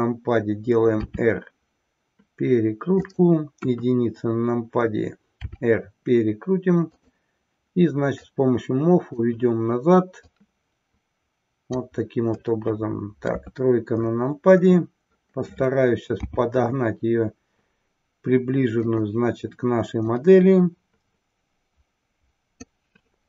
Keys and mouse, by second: 0.9 r, 3.0 click, 3.8 KP_1, 5.3 r, 7.0 click, 8.3-9.3 drag, 10.3-11.8 drag, 12.4-13.4 middle drag, 13.4 KP_3, 16.2 s, 20.0-22.8 drag.